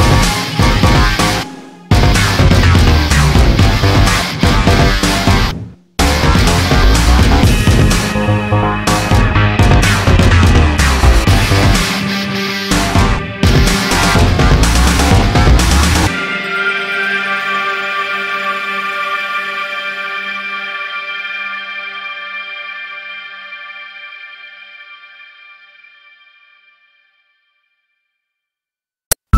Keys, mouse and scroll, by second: 0.8 click, 1.5 middle click, 2.5 middle click, 2.5 scroll down 1, 4.0 middle click, 5.1 middle click, 5.5 scroll up 1, 7.0 middle click, 10.2 middle click, 10.9 f, 11.5 z, 12.7 z, 13.0 middle click, 13.0 scroll down 1, 13.4 F3, 14.4 scroll up 1, 15.2-15.7 scroll up 1, 16.7 middle click, 17.2 scroll up 1, 18.5 click, 18.9 click, 19.4 middle click, 19.6 middle click, 20.5 click, 22.0 click, 23.9 click, 24.7 click, 25.7 click, 27.5 click, 28.7 click.